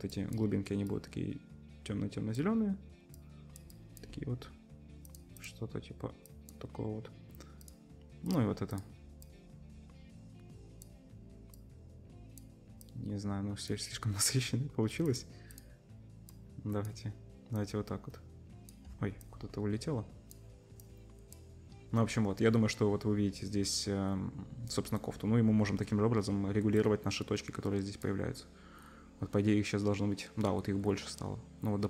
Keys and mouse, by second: 5.0 middle click, 5.1-28.9 drag, 5.3 middle click, 5.3 right click, 7.6 middle click, 7.6 right click, 8.7 middle click, 8.7 right click, 15.0 middle click, 15.0 right click, 26.8-28.9 middle drag, 26.8-28.9 right drag.